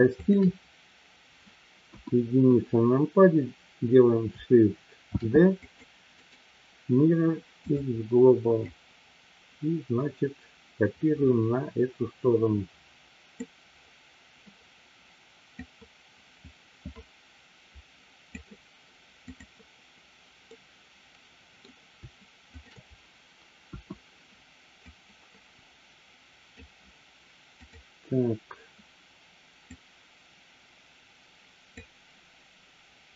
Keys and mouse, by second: 0.2 shift+click, 1.9 KP_1, 5.1 shift+d, 5.7 click, 8.7-13.4 drag, 15.6-18.4 drag, 19.2 click, 20.5-21.6 middle drag, 22.5 shift+click, 23.6 KP_1, 25.0 click, 27.6-28.2 drag, 29.7-31.9 drag.